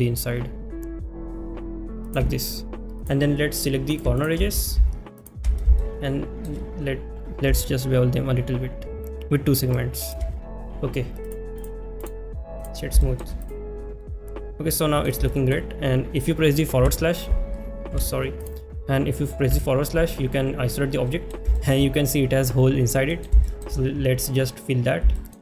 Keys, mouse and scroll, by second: 3.1 click, 3.9 click, 4.2 alt+click, 5.2 alt+shift+click, 5.8 shift+middle click, 8.6 ctrl+shift+b, 11.4 click, 13.0 shift+middle click, 13.5 click, 14.0-15.0 middle drag, 15.3 shift+middle click, 21.1 middle drag, 21.6 shift+middle drag, 23.1 middle click, 23.4 shift+middle click, 25.2 shift+middle click.